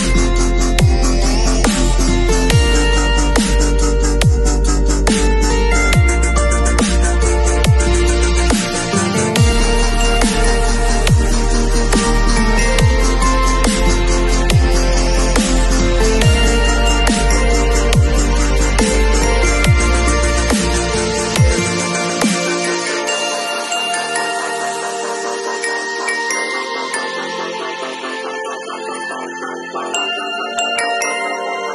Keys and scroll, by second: 3.6 v, 13.2 super+[, 18.7 super+t, 19.6 alt+super+t, 27.6 g, 28.2 shift+g.